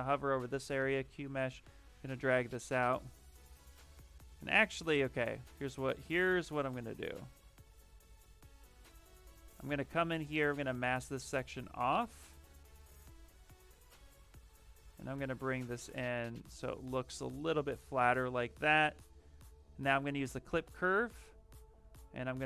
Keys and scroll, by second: 0.2 space, 3.3 ctrl+z, 11.4 w, 16.5 q, 20.0 ctrl+shift+space, 21.7 ctrl+shift+space.